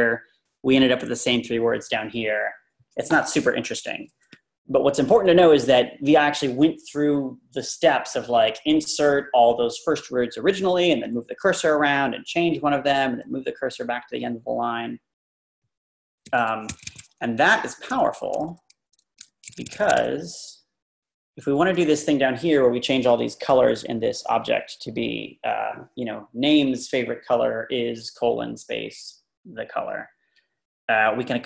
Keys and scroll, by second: 15.2 Left, 15.7 Right, 16.3 typing, 16.7 Escape, 16.9 Escape, 17.5 Up, 18.8-19.2 typing, 20.7 Down, 20.7-22.0 typing, 20.7 Down.